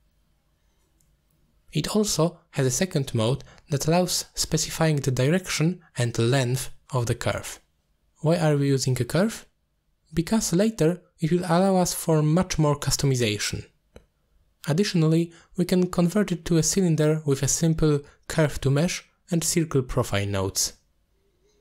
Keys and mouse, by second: 0.8 ctrl+z, 1.0 ctrl+z, 1.4 click, 2.1-3.7 drag, 4.0 middle click, 5.1 click, 6.7-8.3 shift+drag, 9.1 click, 11.1-11.7 middle drag.